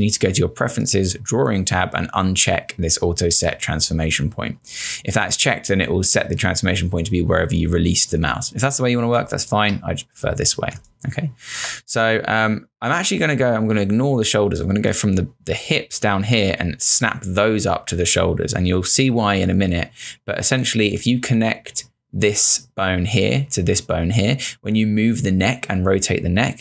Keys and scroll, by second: 9.2 space.